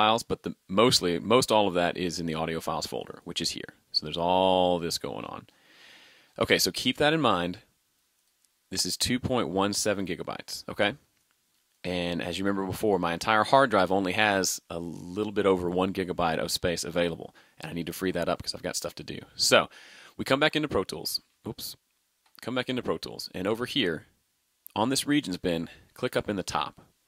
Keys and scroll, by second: 21.3 super+Tab.